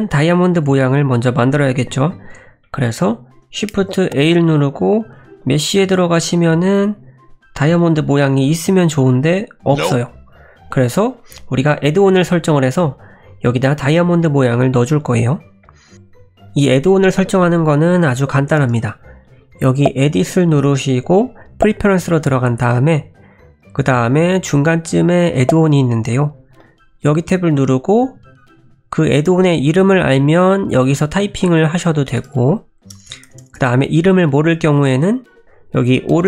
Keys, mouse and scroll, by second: 0.6 middle click, 2.3 scroll down 1, 2.6 middle click, 3.7 shift+a, 19.7 click.